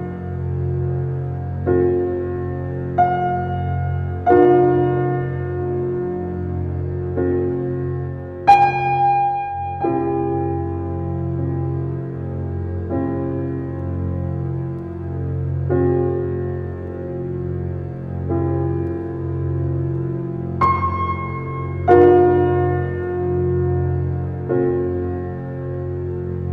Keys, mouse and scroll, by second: 0.4 g, 5.4 Tab, 6.5 g, 8.1 Tab, 8.6 Tab, 8.8 click, 9.1-9.4 middle drag, 9.4-9.8 scroll down 2, 9.8-10.1 middle drag, 10.1-10.9 scroll down 9, 10.9-12.5 middle drag, 12.5 click, 13.1-15.4 middle drag, 16.6 shift+a, 22.7 alt+middle click, 23.2 alt+scroll up 1, 23.8-24.8 shift+middle drag, 24.8 s.